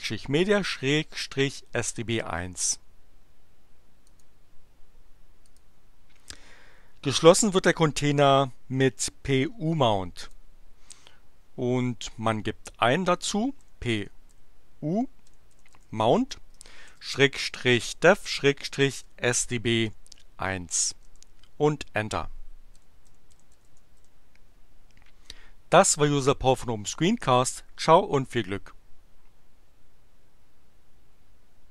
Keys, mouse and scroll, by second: 4.1 click, 5.4 click, 10.2 click, 13.4-19.8 typing, 21.1 Return, 22.5-24.2 typing.